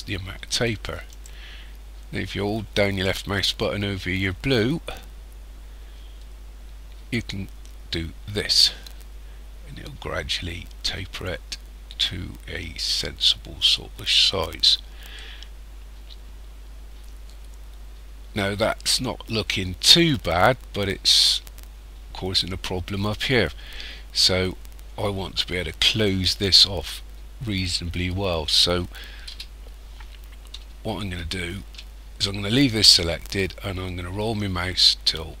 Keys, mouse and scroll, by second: 3.0 click, 15.2 middle click, 29.3 KP_1, 31.0 shift+middle click, 33.2-35.4 scroll up 11.